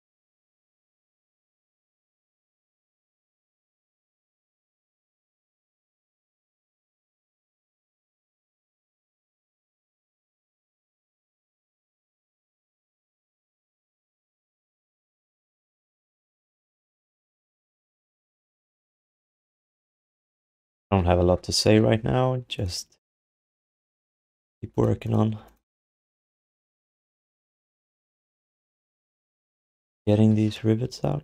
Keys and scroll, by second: 0.6 ctrl+s, 8.4 f, 12.6 alt+q, 13.2 alt+q, 15.8 alt+shift+d, 16.1 ctrl+s, 19.0 alt+q, 19.4 alt+q, 20.3 alt+q, 20.6 alt+q, 27.1 f, 27.5 alt+q, 28.0 alt+q.